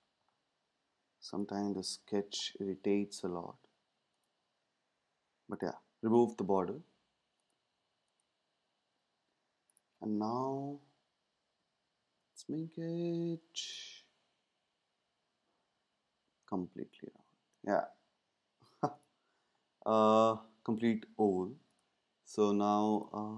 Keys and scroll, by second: 10.7 shift+Down, 12.2 Down, 12.4 Down, 12.6 Down, 12.7 Down, 13.0 Down, 13.7 Down, 15.6 Up, 16.5 Up.